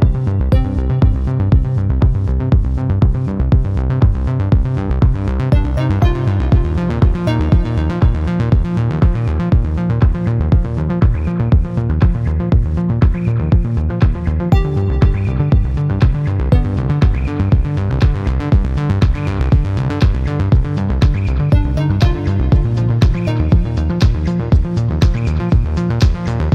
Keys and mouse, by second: 4.1 click, 7.8-10.4 drag, 22.8 click, 23.7-25.2 drag, 26.1-26.5 drag.